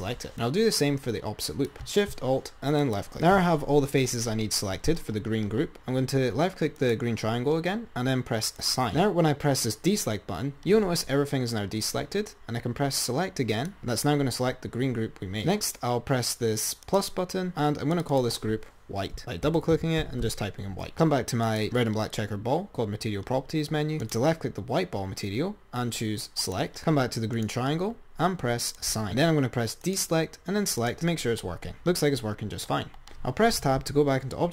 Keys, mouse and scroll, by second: 3.1 ctrl+alt+shift+click, 3.5-4.3 scroll down 10, 7.0 click, 8.8 click, 10.1-11.6 drag, 11.6 scroll down 2, 13.8 click, 17.1-20.8 drag, 21.7 click, 24.2 click, 26.7-27.7 drag, 28.9-31.8 drag, 34.0 Tab.